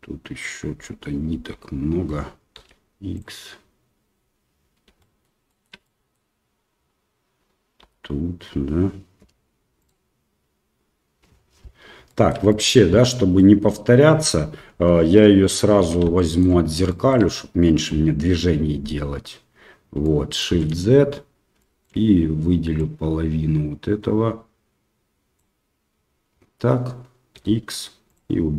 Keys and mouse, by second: 1.5 l, 2.5 x, 5.0 click, 5.5 middle click, 5.8 middle click, 8.0 l, 9.2 Delete, 12.1 shift+middle click, 12.5 middle click, 13.3 middle click, 14.7 KP_1, 16.1 shift+middle click, 16.9 shift+middle click, 20.0 shift+middle click, 20.5 shift+z, 21.6 shift+middle click, 22.9-25.5 drag, 27.3 x.